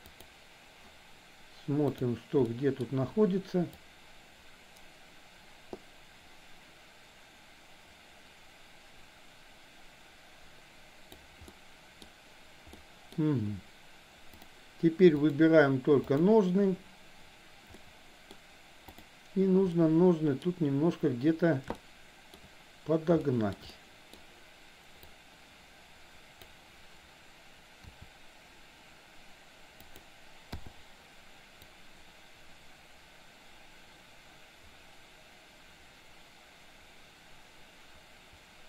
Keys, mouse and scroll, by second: 0.2 click, 1.9 drag, 2.6 middle click, 3.8-11.3 drag, 11.4-12.1 middle drag, 12.8-13.2 middle drag, 15.3 click, 16.1 click, 17.9 middle click, 18.9 drag, 19.7-20.6 middle drag, 21.8-22.4 shift+middle drag, 23.3 shift+middle click, 23.7 middle click, 25.2-26.6 drag, 27.9 r, 30.6 i, 31.8-38.6 drag.